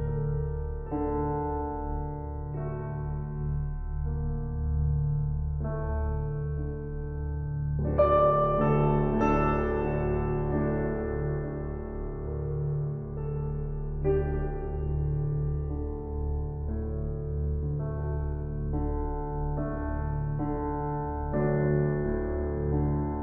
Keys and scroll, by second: 19.0 typing.